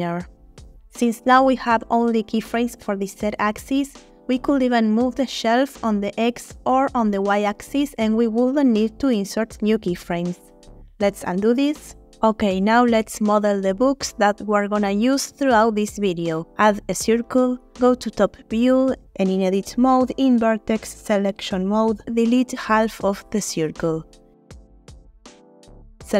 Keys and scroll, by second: 4.7 g, 4.9 x, 8.4 space, 11.0 ctrl+z, 11.4 ctrl+z, 16.5 shift+a, 19.9 ctrl+Tab, 21.4 1, 24.8 Delete.